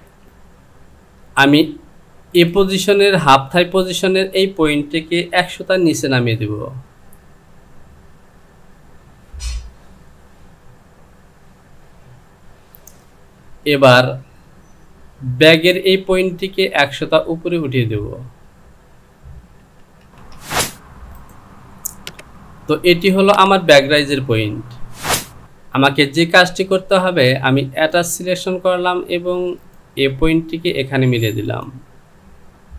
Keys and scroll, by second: 6.5 Down, 8.5 Down, 11.9 Down, 17.9 Down, 18.3 Down, 19.6 KP_Decimal.